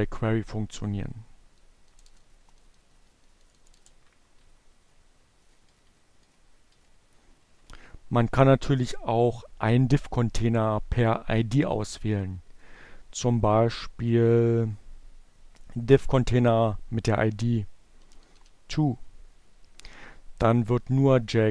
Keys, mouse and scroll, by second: 0.8 BackSpace, 3.4 Up, 3.7 Delete, 5.9 Down, 8.7 Left, 16.5 t, 17.2 w, 19.9 click.